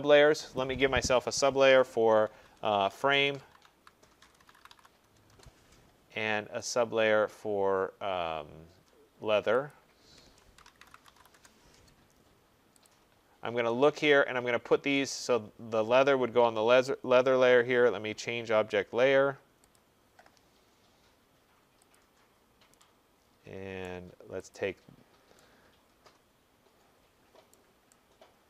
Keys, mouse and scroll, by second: 0.6 click, 2.3-5.3 typing, 6.7 click, 9.7 click, 11.1-11.9 typing, 12.9 click, 15.2 right click, 19.8 click, 22.0 click, 23.9 right click, 24.6 click, 27.5 right click.